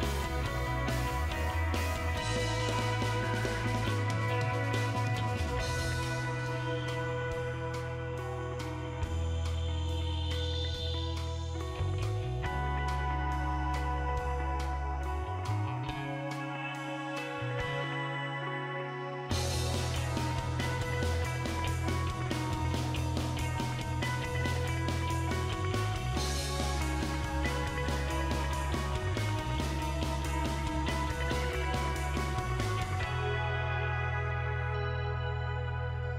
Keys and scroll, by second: 15.0 ctrl+v, 33.6-35.2 typing.